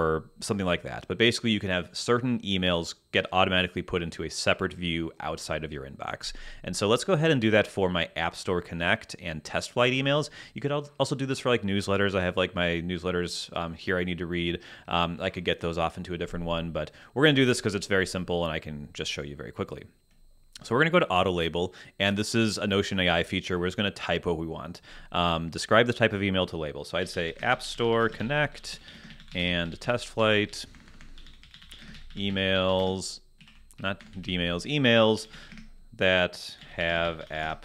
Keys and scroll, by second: 26.8-34.0 typing, 33.4 alt+space, 33.5 alt+Left, 34.2 super+Right, 35.0-37.6 typing.